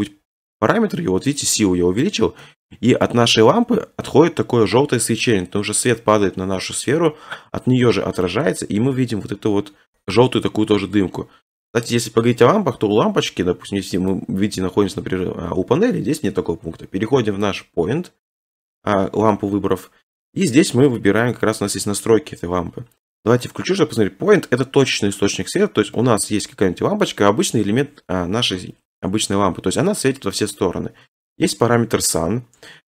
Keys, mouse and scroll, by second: 2.0 click, 3.0-3.3 scroll, 3.3 middle click, 3.5 middle click, 8.5 middle click, 8.5 middle click, 9.1 middle click, 10.8 middle click, 10.9 middle click, 14.1 click, 15.4-16.1 scroll, 17.7 click, 23.2 click, 23.6 scroll, 24.9 scroll, 26.5 shift+middle click, 32.2 click.